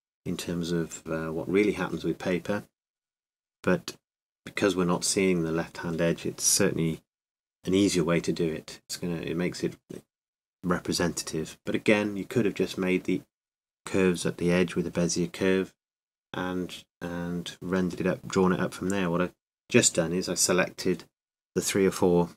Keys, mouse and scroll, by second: 8.7 shift+d, 10.8 s.